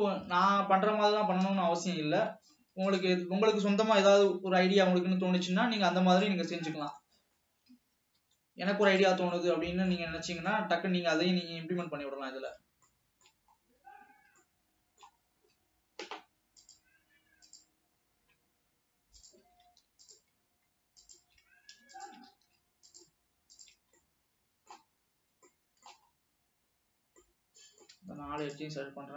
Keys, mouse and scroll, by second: 1.0-1.3 scroll up 1, 1.3 s, 3.5 s, 6.6-7.0 scroll up 2, 7.0 middle click, 7.8 s, 9.4-10.6 middle drag, 10.6 shift+scroll down 2, 10.8-12.4 shift+middle drag, 12.4 scroll down 3, 12.5-13.8 middle drag, 13.8-14.3 scroll up 6, 14.5-15.5 shift+middle drag, 15.5 scroll up 4, 18.3 scroll up 1, 19.3 drag, 21.1 shift+drag, 22.0 shift+click, 22.5 alt+a, 22.9 click, 23.8 shift+click, 24.1-25.2 middle drag, 25.2 scroll down 3, 25.6 shift+middle click, 26.4-27.1 shift+scroll down 4, 27.3-28.9 middle drag, 28.9 shift+click.